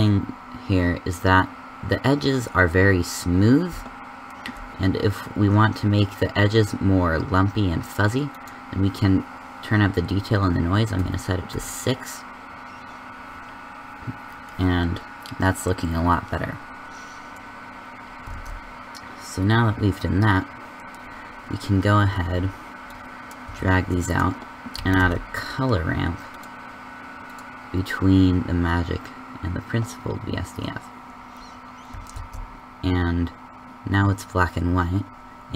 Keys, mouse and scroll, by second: 20.7 shift+z, 22.9 a, 22.9 b, 23.4 g, 24.7 a, 32.1 shift+z.